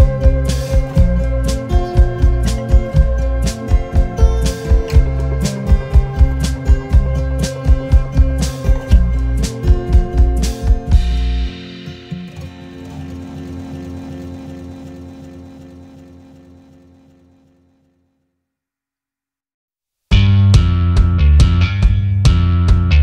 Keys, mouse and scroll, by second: 0.0 alt+scroll down 1, 0.5 space, 1.5 alt+scroll up 1, 1.8 alt+scroll down 1, 5.3 shift+click, 6.9 shift+click, 7.6 alt+scroll up 2, 8.0 double click, 9.4-11.2 typing, 14.3 alt+scroll down 1, 17.1-19.0 typing, 22.3 v.